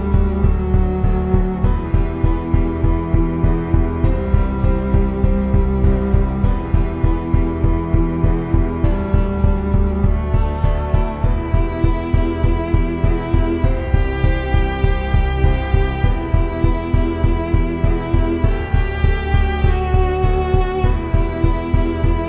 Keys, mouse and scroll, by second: 0.5 Tab, 4.8-6.0 drag, 6.7 Tab, 7.6 click, 8.5 ctrl+a, 9.3 Tab, 9.9 Tab, 11.1 z, 13.2 click, 14.2-15.4 drag, 15.4 middle click, 15.5 z, 16.6 middle click, 17.6 middle click, 18.7 z, 20.2-21.2 drag, 21.2 s.